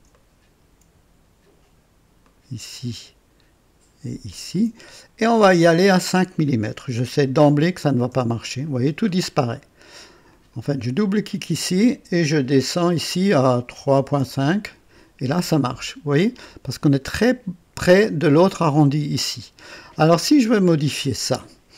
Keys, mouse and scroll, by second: 0.1 ctrl+right click, 2.2 ctrl+click, 4.2 ctrl+click, 5.7 click, 7.2 KP_5, 8.0 KP_Enter, 10.2 click, 12.1-13.0 scroll down 5, 13.7-14.7 typing, 14.3 KP_Enter, 16.0-16.4 scroll up 1, 16.5 typing, 16.7-17.2 drag, 20.2-20.8 scroll down 3.